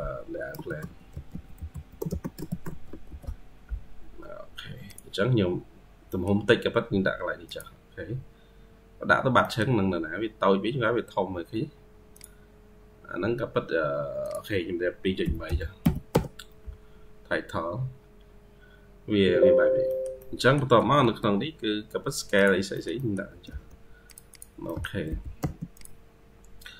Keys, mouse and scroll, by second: 0.7 typing, 5.9 middle click, 8.2-8.6 scroll up 2, 8.6-9.3 scroll down 8, 9.8-10.3 scroll up 3, 10.3-11.1 scroll down 8, 11.1 scroll down 3, 17.1-19.7 scroll up 13, 19.7 middle click, 20.6 Escape, 20.9 Escape, 22.6 middle click, 23.1 typing, 24.2 double click, 24.5 middle click, 24.9 m.